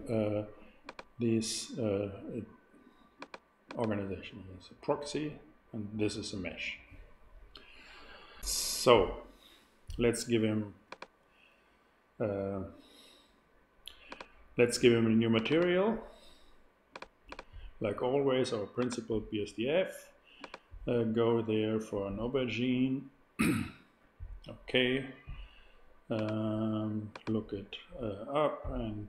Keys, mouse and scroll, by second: 8.3 super+z, 10.8-13.3 drag, 14.0-17.2 drag, 17.5-19.6 drag, 20.3-22.5 drag.